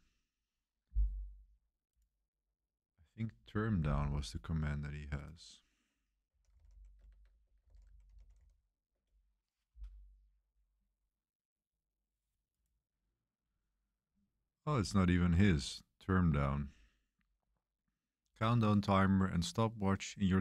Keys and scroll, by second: 5.5-9.4 typing.